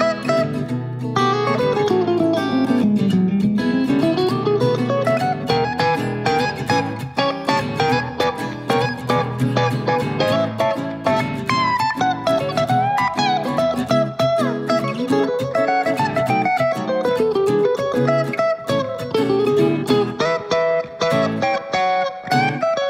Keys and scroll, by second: 10.8 BackSpace, 20.3-20.9 typing, 21.5 Return.